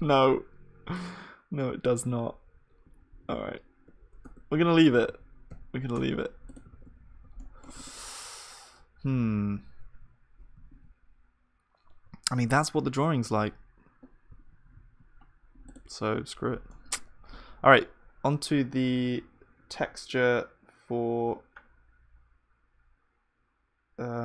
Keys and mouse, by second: 3.0 ctrl+z, 4.2 Tab, 5.1 ctrl+z, 5.9 Tab, 6.7 ctrl+s, 6.7-9.4 drag, 7.4-13.3 middle drag, 10.7 z, 13.3 z, 14.3 z, 14.8 z, 15.4-24.2 middle drag, 16.7-17.7 drag.